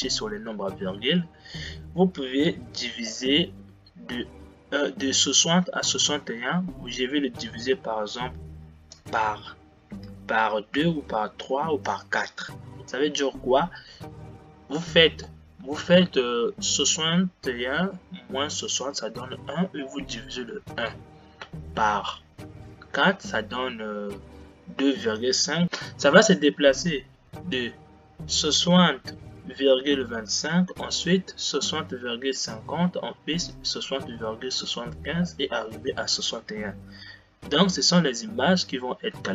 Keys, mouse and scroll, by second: 9.1-12.1 drag.